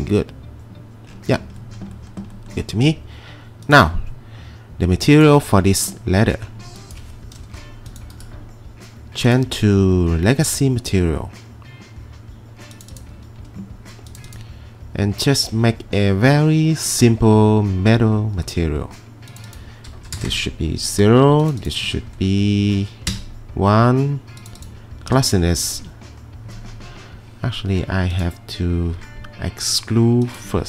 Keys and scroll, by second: 7.6 Delete, 20.2 0, 20.3 Return, 21.8 1, 23.1 Return, 25.3 typing.